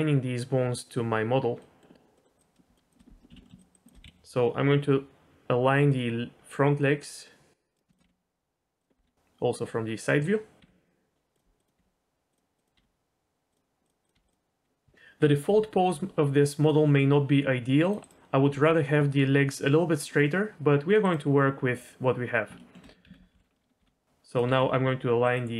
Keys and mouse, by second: 1.6 middle click, 2.1 middle click, 2.3 click, 2.8 shift+click, 3.3 ctrl+z, 3.4 middle click, 3.7 shift+click, 4.0 KP_1, 5.7 g, 7.9 click, 9.0 KP_1, 10.6 g, 11.6 click, 11.7 g, 12.6 click, 12.7 g, 13.8 click, 14.0 click, 14.1 g, 17.8 click, 18.0 g, 18.5 g, 22.6 shift+middle click, 23.4 l, 23.8 r, 24.4 g.